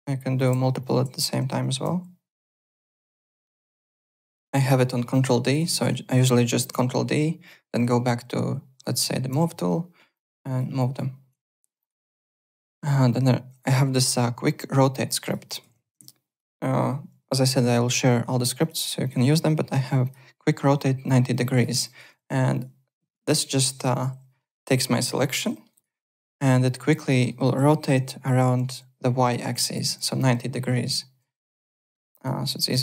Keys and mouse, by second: 0.3 click, 0.8 shift+click, 1.5 ctrl+d, 1.8 w, 2.4 click, 3.2 click, 4.8 click, 5.3 Tab, 5.5 click, 5.7 click, 6.7 ctrl+d, 9.3 w, 10.1 click, 10.8 alt+click, 11.2 alt+Tab, 11.8 alt+click, 14.7 alt+Tab, 15.2 alt+click, 15.9 `, 17.1 Home, 18.6 click, 20.0 click, 21.3 click, 21.6 alt+middle click, 21.8 alt+click, 21.9-24.1 typing, 22.5 click, 23.2 alt+right click, 23.7 click, 24.4 alt+middle click, 25.3 g, 25.5 alt+middle click, 25.7 alt+right click, 26.6 click, 27.1 alt+middle click, 27.3 alt+right click, 27.9 alt+e, 29.3 alt+e, 31.1 w, 31.5 click, 32.1-32.8 typing, 32.5 click.